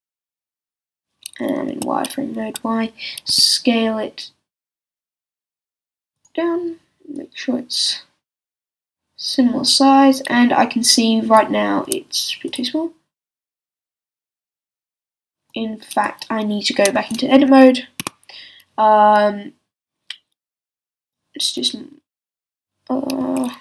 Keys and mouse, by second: 1.7 z, 3.3 s, 6.2-11.8 drag, 11.8 s, 12.5-15.0 drag, 15.5-18.4 drag, 16.9 Tab, 20.8 b, 23.2 a.